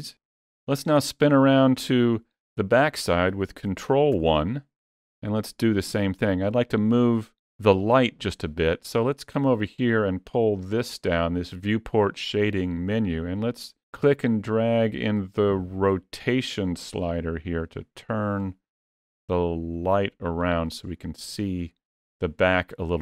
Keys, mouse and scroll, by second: 3.9 ctrl+KP_1, 10.4 click.